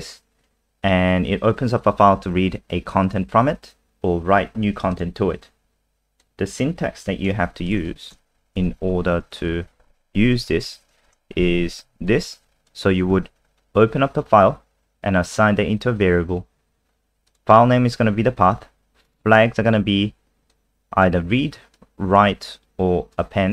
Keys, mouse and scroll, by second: 7.4 ctrl+c, 7.7 click, 8.4 ctrl+End, 8.7 Return, 8.9 Return, 9.4 ctrl+v, 11.1 BackSpace, 12.1 click.